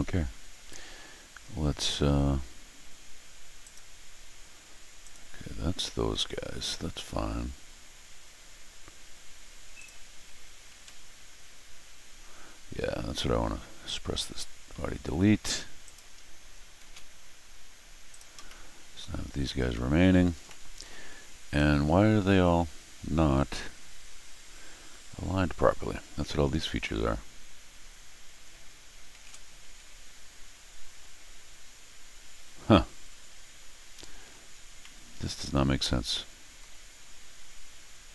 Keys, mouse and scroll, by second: 0.7 middle click, 0.7 scroll down 1, 3.6 click, 5.0 click, 9.7 click, 13.8 click, 15.8 click, 16.8 shift+s, 18.1 click, 18.4 scroll down 2, 18.4 middle click, 19.7 middle click, 20.4 scroll up 1, 20.4 middle click, 21.5 scroll up 2, 25.9 scroll down 2, 27.5 scroll down 2, 29.1 ctrl+alt+shift+r, 34.5 scroll down 2, 34.8-36.6 middle drag.